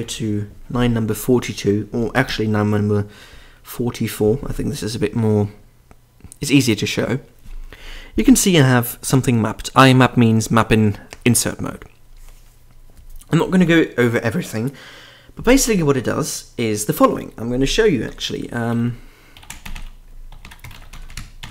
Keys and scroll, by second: 0.0-0.5 typing, 2.0 Down, 2.1 Down, 2.2 Down, 3.9 Up, 5.0 typing, 18.1 super+d, 19.1-21.5 typing.